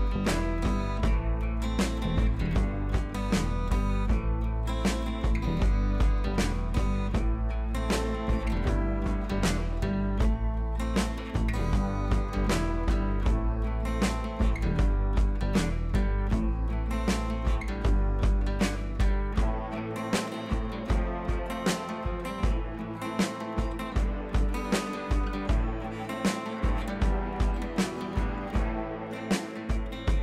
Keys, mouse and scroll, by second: 0.3 click, 4.9-12.1 drag, 18.5-19.1 scroll down 1, 27.6 scroll down 1.